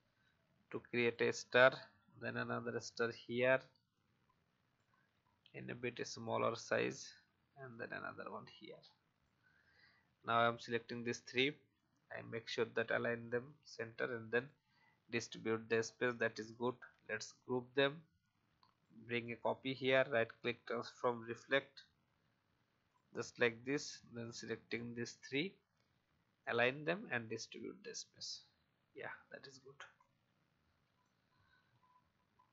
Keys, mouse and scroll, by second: 0.2 click, 1.5-2.7 alt+drag, 3.9 shift+click, 5.4-8.2 drag, 8.4 shift+click, 9.6 click, 15.5-15.8 alt+scroll down 1, 16.6 ctrl+g, 17.6-18.8 alt+drag, 19.2 right click, 21.4 click, 23.6 shift+click, 24.6 shift+click, 26.3 click, 29.9 shift+click, 32.0 shift+Left.